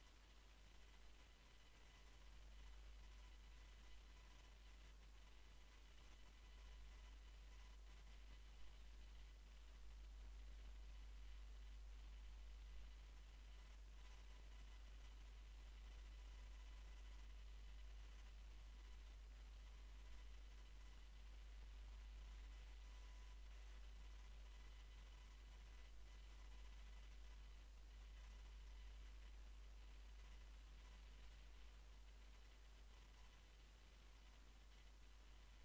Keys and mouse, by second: 0.7 Tab, 5.0 a, 5.2 a, 5.9 r, 9.4 middle click, 9.5 middle drag, 9.9 middle click, 10.3 middle click, 10.7-11.9 drag, 13.5 ctrl+r, 15.4 ctrl+r, 15.7 click, 19.5-21.2 drag, 21.2 w, 27.7 middle click, 28.7 ctrl+z, 33.6-35.1 middle drag.